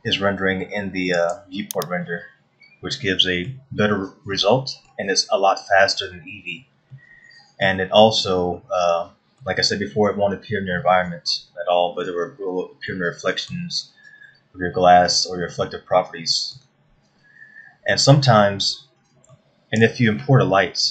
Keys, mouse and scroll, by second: 1.7 click, 2.7 middle click, 5.0 middle click, 8.1 middle click, 8.7-9.0 scroll down 2, 9.2 middle click, 12.8-13.5 scroll up 2, 13.5 middle click, 16.1 middle click, 18.4-19.1 scroll down 2, 19.9 shift+middle click.